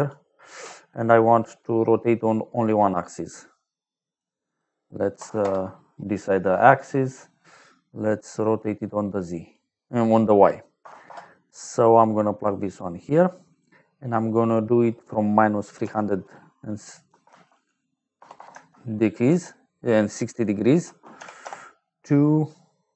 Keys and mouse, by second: 3.2 click, 4.4 click, 5.1 KP_0, 5.3 Return, 8.4 click, 9.7 click, 10.7 KP_0, 11.0 Return, 12.4 click, 14.2 click, 17.0 t, 18.1 BackSpace, 18.3 BackSpace, 18.4 Caps_Lock, 19.2 t, 20.7 a, 21.1 u, 21.3 Return.